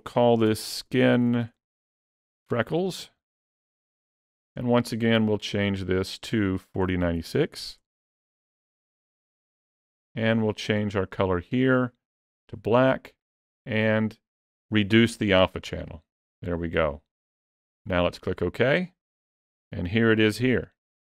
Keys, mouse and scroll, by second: 0.4-1.3 typing, 20.5 click.